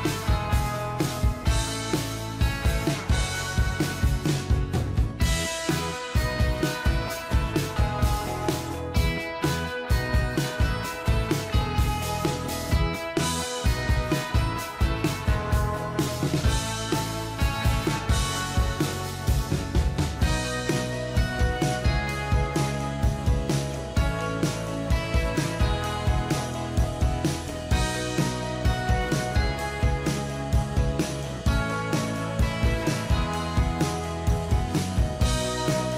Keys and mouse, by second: 11.6 ctrl+z, 12.9 ctrl+z, 14.0-15.2 typing, 16.0 double click, 17.2 double click, 17.6 double click, 18.0 double click, 18.4 double click, 18.8 double click, 23.1 ctrl+j, 25.8 ctrl+-, 28.3 ctrl+t, 29.2 shift+click, 32.6 ctrl+click.